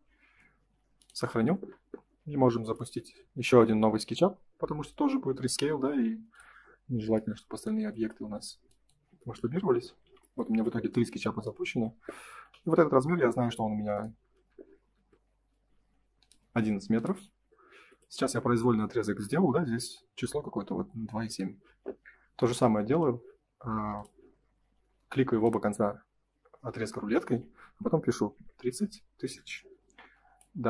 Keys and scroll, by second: 8.1 space, 9.4 Delete, 10.0 F5, 16.3 space, 29.2 Return.